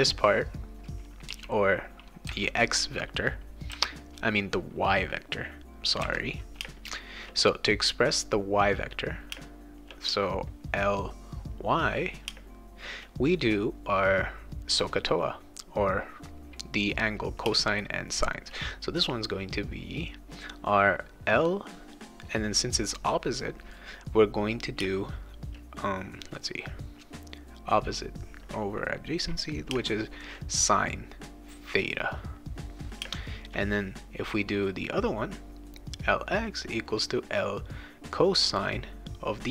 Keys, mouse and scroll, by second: 1.3 e, 1.5 click, 2.3 b, 3.7 v, 6.0 b, 6.6 space, 6.8 click, 9.3 space, 9.5 click, 10.5 click, 11.1 click, 11.9 click, 12.1 click, 12.3 space, 17.4 space, 17.9 click, 21.2 click, 24.8 space, 25.0 click, 29.7 space, 29.9 click, 30.8 click, 31.3 click, 31.5 click, 31.7 click, 32.3 click, 33.0 space, 33.2 click, 34.0 click, 34.9 click, 35.7 click, 36.0 click, 36.4 click, 36.5 click, 37.0 click, 37.7 click, 38.0 click, 38.4 click, 39.0 click.